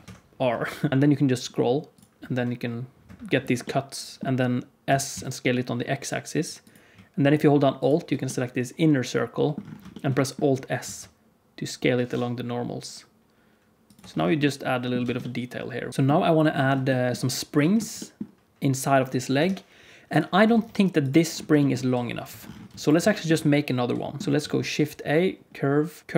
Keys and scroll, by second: 0.9 ctrl+r, 4.8 s, 10.8 alt+s, 13.9 Tab, 14.9 alt+a, 19.3 KP_1, 20.4 shift+d, 21.9 g, 22.6 x, 24.2 ctrl+s, 24.2 shift+c, 24.3 shift+a.